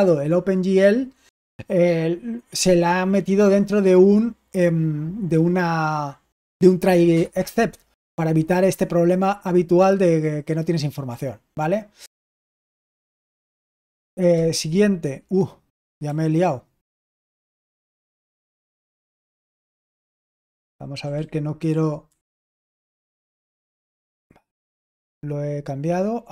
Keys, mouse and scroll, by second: 14.3 Return, 16.8 Up, 17.3 Down, 17.5 Down, 17.9-24.7 typing, 24.7 Return.